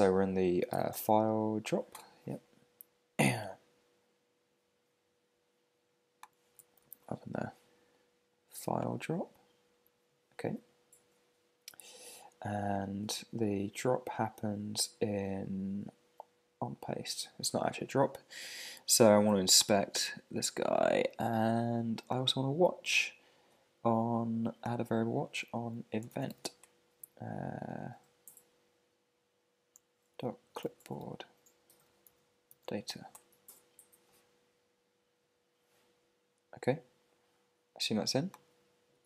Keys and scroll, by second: 1.9 Return, 32.5 shift+d, 33.1 Return, 38.9 Return.